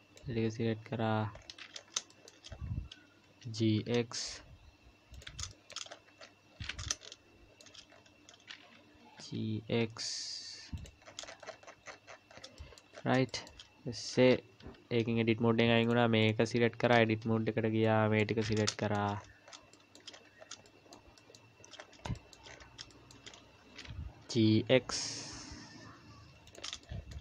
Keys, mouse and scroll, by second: 1.3-1.8 scroll up 4, 2.0-3.0 scroll up 7, 2.1 shift+middle click, 3.4 g, 5.5 shift+middle click, 5.9-7.1 scroll up 13, 6.9 shift+middle click, 7.9-8.2 scroll up 1, 9.0 g, 11.1-12.4 scroll down 44, 12.6 shift+middle click, 12.9-13.3 scroll up 6, 13.3 shift+middle click, 14.6 Tab, 15.8 click, 16.2 click, 16.9 Tab, 17.8 click, 18.7 shift+middle click, 19.1-19.7 scroll up 9, 19.7 shift+middle click, 20.1-20.7 scroll up 4, 20.7 shift+middle click, 21.7-22.7 scroll up 4, 22.2 shift+middle click, 22.9 shift+middle click, 23.3-24.2 scroll up 2, 24.2 g, 26.8 shift+middle click.